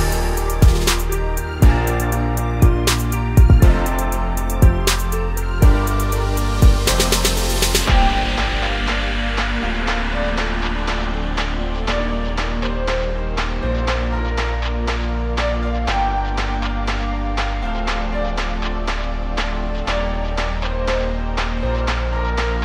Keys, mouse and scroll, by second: 1.4 2, 1.6 click, 2.0 shift+click, 2.5 shift+click, 2.7 middle click, 3.4 shift+click, 3.7-7.7 middle drag, 5.0 ctrl+x, 5.5 a, 6.0 scroll down 2, 7.7 click, 8.0-11.4 middle drag, 9.1 ctrl+x, 9.4-10.2 scroll up 2, 10.2 scroll down 2, 10.6 Tab, 11.4 click, 11.6 x, 12.1 click, 12.3 2, 12.4 click, 12.7 KP_7, 13.2 g, 15.8 ctrl+shift+click, 17.5 click, 17.9 shift+click, 18.2 g, 19.8 click, 20.4 g, 21.5 ctrl+shift+click, 21.7 scroll down 1, 21.8 Tab.